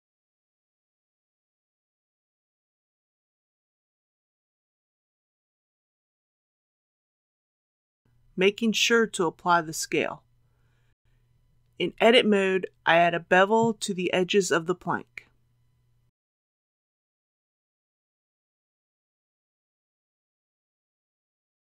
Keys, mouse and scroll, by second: 2.6 click, 3.3-4.0 typing, 6.2 click, 7.1 KP_3, 8.0 ctrl+a, 9.4 click, 11.0 click, 12.3 Tab, 13.5 2, 14.9 alt+a, 15.4-16.6 middle drag, 17.6 alt+click, 19.2 alt+shift+click, 19.7 shift+click, 20.7 shift+click.